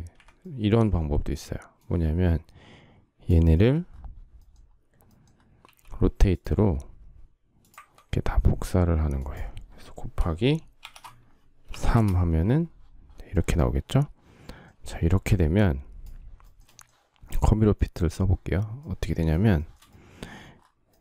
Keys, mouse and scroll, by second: 10.5 shift+8, 11.3 3, 11.6 Return, 14.4 space, 16.2 shift+middle click, 19.2 shift+middle click.